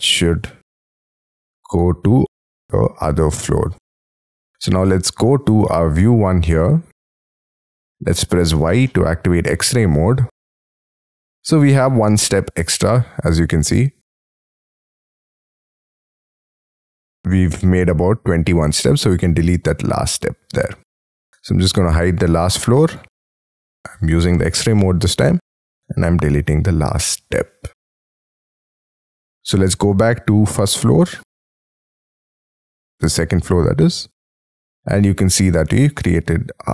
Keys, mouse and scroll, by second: 2.7 space, 2.8 scroll down 5, 3.2 Escape, 3.5 Escape, 3.6 scroll up 4, 8.5 y, 9.0 middle click, 9.7-11.1 scroll up 28, 11.1 middle click, 13.5 scroll down 6, 14.1-14.7 scroll down 12, 14.8-15.4 scroll up 14, 15.4 middle click, 17.7-18.2 scroll down 14, 18.4-19.3 scroll up 13, 20.5 scroll down 7, 21.4 F2, 23.0 double click, 23.2 double click, 24.1 scroll up 4, 24.7 middle click, 25.7 Delete, 27.9 scroll down 5, 28.5 y, 29.0 F3, 29.5 Escape, 29.7 Escape, 33.8 middle click.